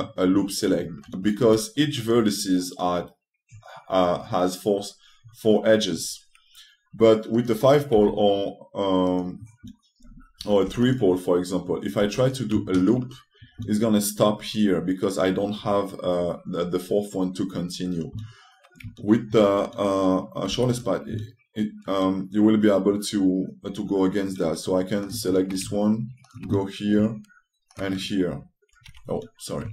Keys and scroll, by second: 2.1 3, 8.7 2, 11.3 3, 12.7 2, 21.2 2.